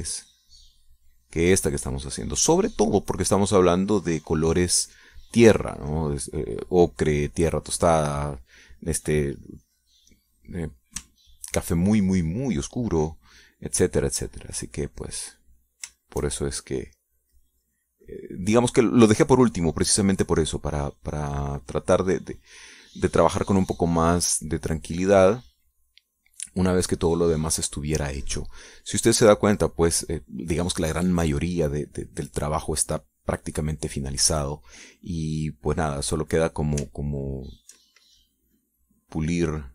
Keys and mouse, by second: 6.8 click, 7.9 click, 8.9 click, 10.8 click, 12.2 ctrl+click, 15.0-17.2 drag, 17.3-23.3 shift+drag, 25.0-32.7 drag, 34.9 click, 35.4 click, 38.1 ctrl+click, 39.3-39.7 drag.